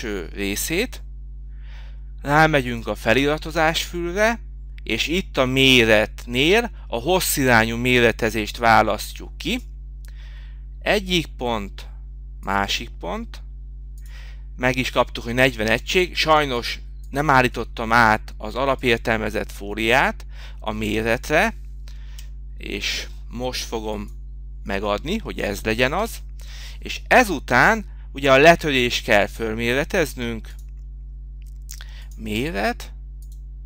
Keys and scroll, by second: 26.5 Escape.